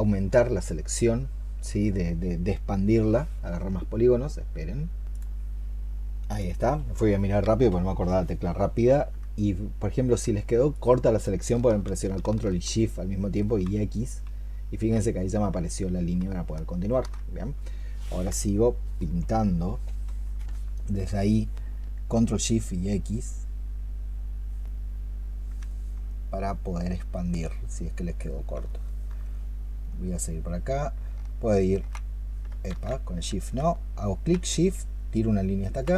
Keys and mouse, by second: 13.3 ctrl+shift+x, 14.6 ctrl+shift+x, 15.9 ctrl+shift+x, 25.5 alt+click, 28.5 alt+click, 31.2 shift+click, 33.0 ctrl+z.